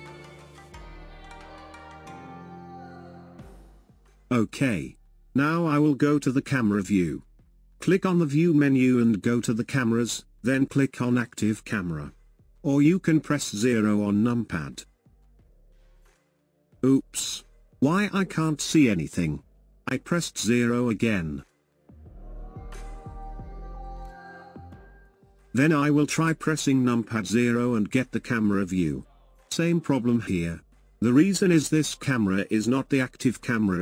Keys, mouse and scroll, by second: 0.0-2.4 middle drag, 2.4 scroll down 2, 3.3-4.0 scroll up 2, 5.0-8.6 shift+middle drag, 9.4-19.1 drag, 19.1 KP_0, 20.4-21.1 scroll down 2, 21.9-23.0 shift+middle drag, 23.0-28.2 drag, 28.2 KP_0, 30.4-31.1 scroll down 1, 31.1-33.5 middle drag, 33.5-33.8 scroll down 6.